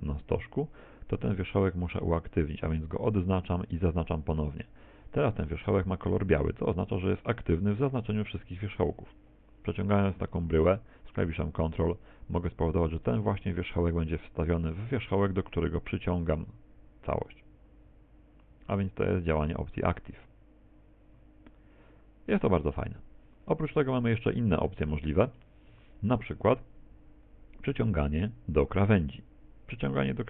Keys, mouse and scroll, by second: 1.8 shift+right click, 3.6 shift+right click, 5.0 scroll up 3, 6.9-10.0 scroll down 3, 10.2 g, 24.4 middle click, 25.0 middle click, 25.8 Tab, 27.7 click.